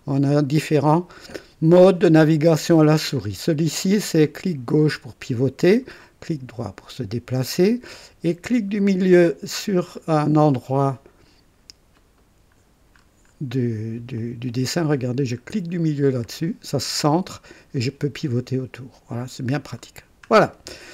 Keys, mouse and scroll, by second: 3.0 click, 3.8-6.0 drag, 6.0-7.6 right drag, 11.9 middle click, 12.9-13.9 scroll up 3, 14.1 right click, 16.2 middle click, 17.1-19.6 drag, 19.6-20.3 scroll down 2, 20.5-20.9 right drag.